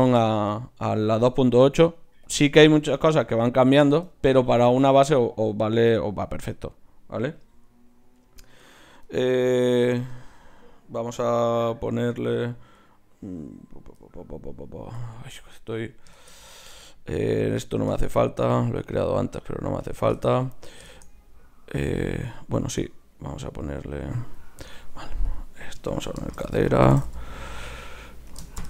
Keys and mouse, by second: 2.2 click, 2.7 right click, 2.7 z, 3.1 click, 3.4 z, 5.1-8.3 right drag, 6.5 click, 8.3-9.7 drag, 15.1 Escape, 15.8-17.6 right drag, 17.9 x, 25.3-28.6 drag.